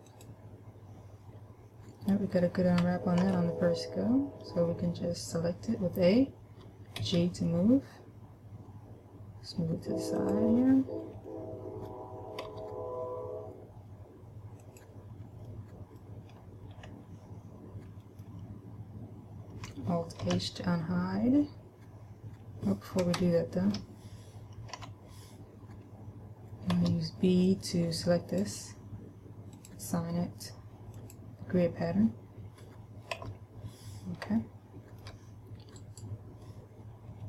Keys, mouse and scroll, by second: 3.5 a, 7.4 g, 10.6 click, 11.6 middle click, 12.9 g, 15.2 click, 15.9 middle click, 16.8-17.1 scroll down 1, 18.4 middle click, 20.5 alt+h, 23.5 shift+middle click, 25.2 a, 27.2 b, 29.9 click, 33.5 a, 34.7 shift+middle click, 36.2 right click.